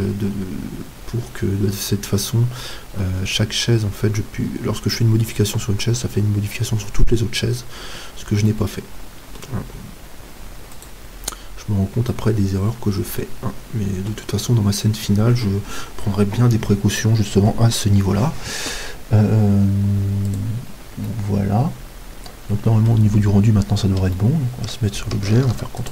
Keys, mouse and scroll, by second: 2.3-3.4 middle drag, 9.8-16.6 middle drag, 10.8-12.6 right drag, 20.3-22.1 right drag, 21.1-23.0 middle drag, 23.1-25.5 middle drag, 25.5 ctrl+s.